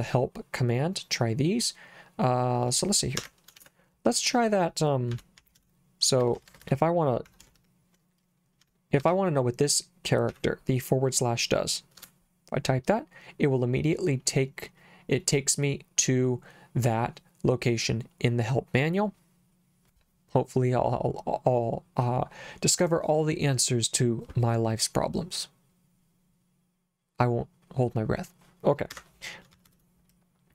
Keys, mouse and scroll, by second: 3.2 Escape, 3.5 shift+;, 4.8-9.0 typing, 10.3 /, 12.0 Return, 28.9 Escape, 29.5 shift+z, 29.6 shift+z.